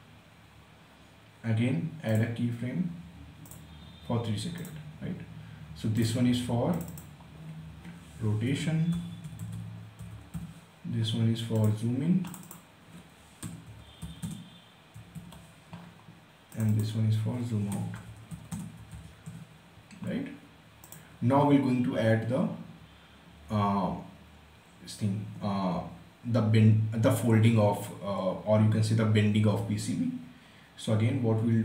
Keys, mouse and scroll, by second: 1.6 click, 7.8-10.4 typing, 11.1 click, 12.7-15.2 typing, 16.1 click, 17.1-19.3 typing, 20.4 click.